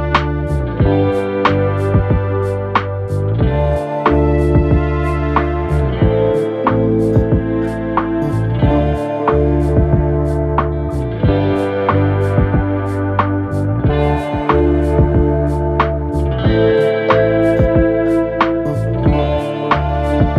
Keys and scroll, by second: 17.9 typing, 18.1 ctrl+a.